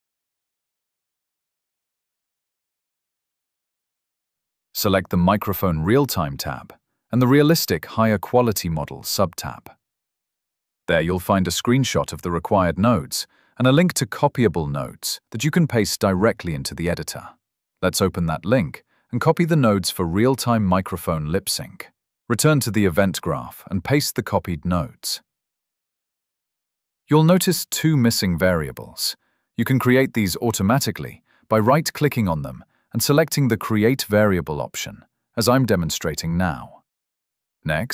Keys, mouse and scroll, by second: 3.8 scroll, 5.9 click, 6.1 scroll, 8.2 click, 14.3 scroll, 18.7 scroll, 20.3 ctrl+c, 24.7 click, 25.5 ctrl+v, 27.2 click, 28.6 right click, 29.3 scroll, 29.9 right click, 31.2 click, 32.4 right click, 33.7 click, 34.6 right click, 35.4 scroll, 36.0 right click, 36.9 click.